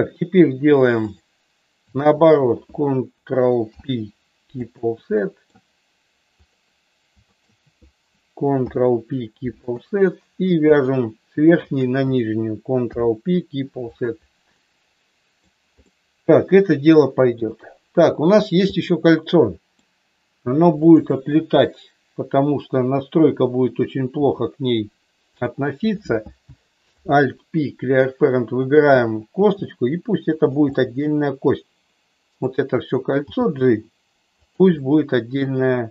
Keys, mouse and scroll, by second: 2.2 shift+click, 3.7 ctrl+p, 5.2 middle click, 6.4 click, 7.3 shift+click, 8.5 ctrl+p, 10.6 click, 11.5 shift+click, 12.8 ctrl+p, 14.5 middle click, 15.9-17.3 middle drag, 18.9 middle click, 20.8 click, 24.2 e, 25.3 click, 25.8 click, 26.9 alt+p, 29.3 g, 30.3 click, 30.8-32.4 middle drag, 33.1 g, 34.3 click, 34.8-35.9 middle drag.